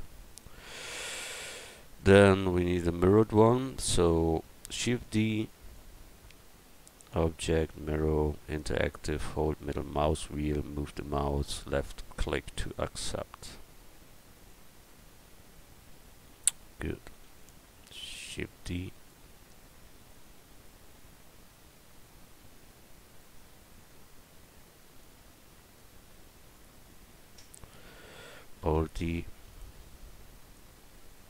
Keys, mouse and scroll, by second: 0.1-2.7 middle drag, 2.8-4.8 middle drag, 4.8 shift+d, 5.4 click, 8.8 click, 12.6-14.5 drag, 14.9-17.1 middle drag, 17.1 shift+d, 18.3-23.2 drag, 19.3 right click, 23.8-25.7 drag, 25.8-27.7 drag, 28.6 alt+d, 29.5-31.2 drag.